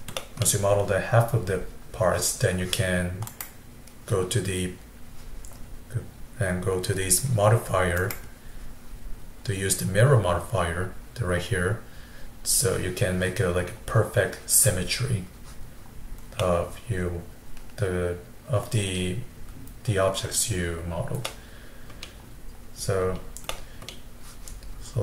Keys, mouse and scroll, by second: 0.2 middle click, 0.5-2.6 scroll down 1, 3.3 click, 8.0-11.0 drag, 14.0-16.4 scroll down 1, 16.4-19.4 middle drag, 21.3-22.6 middle drag, 22.6-23.1 scroll up 1, 23.1-23.5 scroll down 1, 23.5-25.0 middle drag.